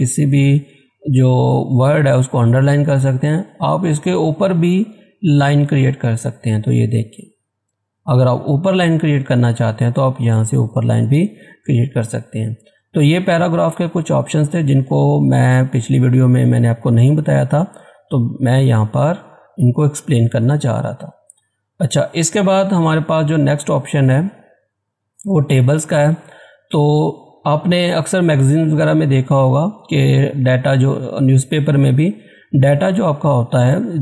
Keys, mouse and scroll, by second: 0.7 click, 12.5 click, 20.3 click, 21.5 click, 21.5 scroll down 1, 25.3 click, 25.9 scroll up 1, 27.9 click.